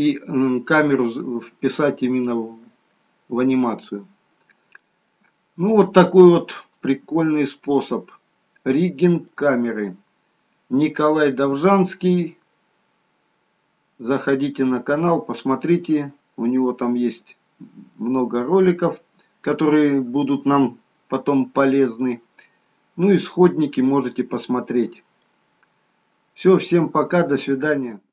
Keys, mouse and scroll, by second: 5.2-5.8 scroll up 3, 5.8-6.3 scroll down 3, 6.5 middle click, 8.4-9.2 scroll up 2, 9.4 middle click, 14.7-15.2 scroll up 3, 15.2-15.7 scroll down 1, 15.7 middle click, 20.8 scroll down 2, 21.5 scroll up 2, 22.0 middle click.